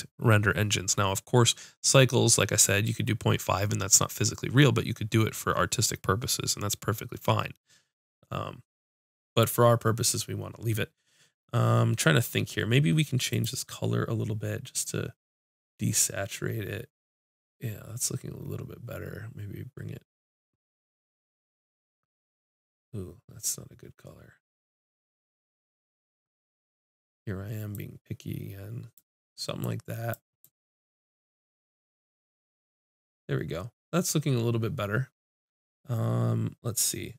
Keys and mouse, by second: 13.5-15.6 drag.